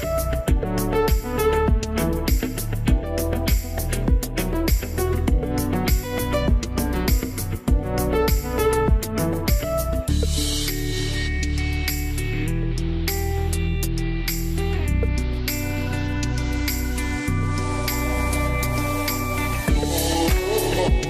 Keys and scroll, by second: 0.1 space, 1.9 z, 6.9 w, 12.6 space.